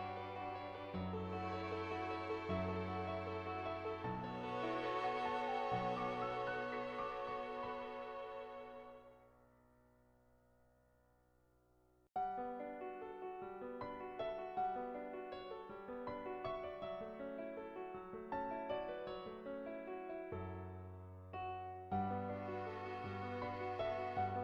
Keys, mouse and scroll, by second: 1.1 click, 4.1-5.5 drag, 16.8 click, 18.4 click, 19.1 click, 21.4 click, 23.7 click.